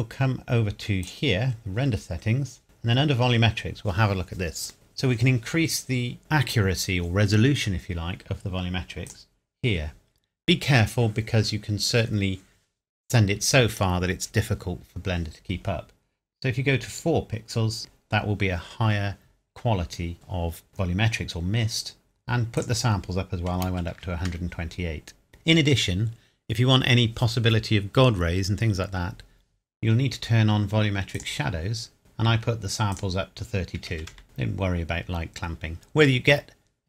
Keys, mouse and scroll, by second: 1.0 click, 9.1 click, 17.8 click, 22.6 click, 23.5 KP_1, 23.7 KP_2, 23.9 KP_8, 24.3 KP_Enter, 25.3-27.2 scroll down 1, 31.2 click, 32.9 click, 33.8 KP_3, 33.9 KP_2, 34.1 KP_Enter.